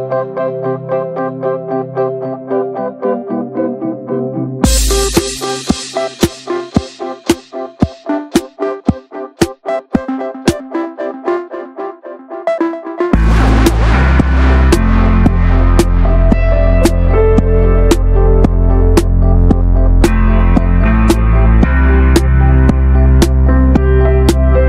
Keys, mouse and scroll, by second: 0.1 alt+z, 0.6 alt+z, 0.8 click, 1.2 shift+middle click, 1.9 click, 2.1-2.8 middle drag, 2.8 click, 3.0 alt+shift+click, 3.2-4.5 shift+middle drag, 4.5 alt+shift+click, 5.4 alt+shift+click, 5.6-6.2 middle drag, 6.2 ctrl+b, 7.3 Tab, 7.3 click, 7.6 Tab, 7.9 a, 8.1 a, 8.2 right click, 8.8 Tab, 8.8 click, 9.1 ctrl+s, 9.6 click, 9.8 ctrl+s, 10.0 scroll down 1, 10.2 /, 10.5-10.8 middle drag, 10.8 ctrl+s, 10.9 middle drag, 11.1 scroll up 1, 11.2 ctrl+s, 11.6 click, 11.8 middle drag, 12.1 scroll up 1, 12.2-12.7 shift+middle drag, 12.7 shift+click, 13.1 /, 13.2-13.6 middle drag, 13.6 click, 13.8 middle click, 13.9 scroll up 1, 14.1-14.5 shift+middle drag, 14.5 scroll up 1, 14.7 Tab, 14.8 shift+middle click, 15.3 drag, 15.4 Tab, 15.5 click, 15.8 Tab, 16.0 middle click, 16.4-17.2 scroll up 2, 16.7 middle click, 17.2 click, 17.8 Tab, 17.9 click, 18.1 ctrl+a, 18.8 click, 19.0 ctrl+a, 19.3 click, 19.6 Tab, 19.9 middle click, 20.4-20.8 scroll up 1, 21.0 alt+shift+click, 21.3-22.5 shift+middle drag, 22.5 alt+shift+click, 22.7-23.2 middle drag, 23.2 alt+shift+click, 23.3 scroll down 1, 23.5-23.8 middle drag, 23.8 scroll up 2, 24.0 shift+middle click.